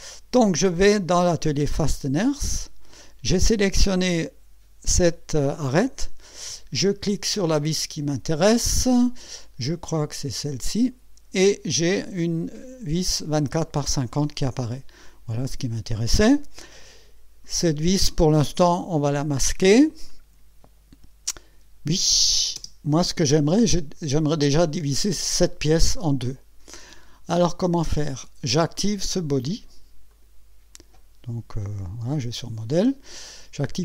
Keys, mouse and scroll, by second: 0.0 click, 1.9 click, 10.4 click, 22.0 click, 22.6 space, 23.1 space, 29.5 right click, 30.1 click, 32.1 click.